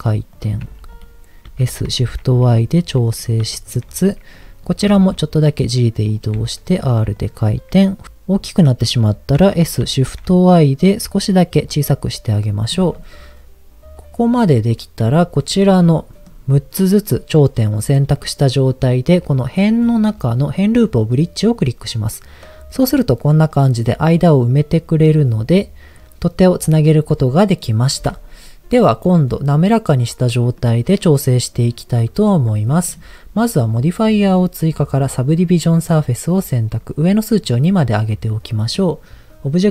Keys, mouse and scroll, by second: 0.3 click, 0.6 g, 0.9 click, 1.5 s, 2.0 shift+y, 3.1 click, 3.5 shift+middle click, 4.4 click, 4.9 g, 6.1 click, 6.3 r, 7.1 click, 9.5 s, 10.0 shift+y, 11.6 click, 15.2 shift+click, 15.8 middle click, 17.1 middle click, 19.7-21.8 drag, 22.1 middle click, 23.5-25.1 middle drag, 26.6-28.0 middle drag, 30.8 middle click, 31.8 Tab, 37.6 click, 38.2 middle click.